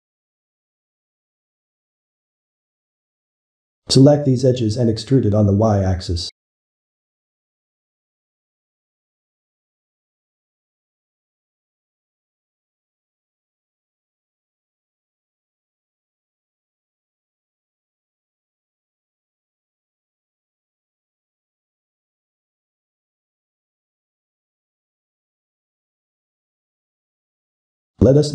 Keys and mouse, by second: 1.9 click, 2.3-3.0 middle drag, 3.0 click, 3.3-4.8 middle drag, 4.8 click, 5.7 shift+click, 6.1-7.6 middle drag, 7.6 ctrl+click, 8.2-11.3 middle drag, 11.3 e, 13.5 e, 15.1 e, 18.9 middle click, 20.0-27.1 middle drag, 27.7 click.